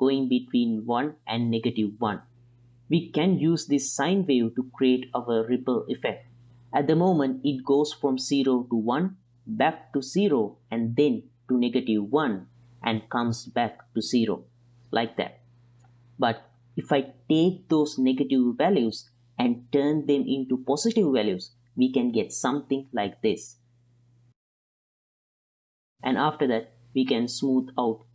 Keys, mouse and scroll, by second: 0.8 click, 1.2 click, 1.8 click, 2.1 click, 2.8 click, 3.0 click, 6.8-7.6 middle drag, 8.3 right click, 8.9 click, 9.4 click, 9.9 click, 10.4 click, 11.1 click, 11.5 click, 11.8 click, 12.5 click, 14.4 click, 15.7 click, 16.2 click, 19.4 n, 19.9 click, 21.1-22.8 drag, 23.4-23.7 drag, 23.8 click, 24.0 click, 24.1 click, 24.7 click, 25.0 click, 25.3 click, 26.2 click, 26.2 middle click, 26.2 right click, 27.6-28.1 drag.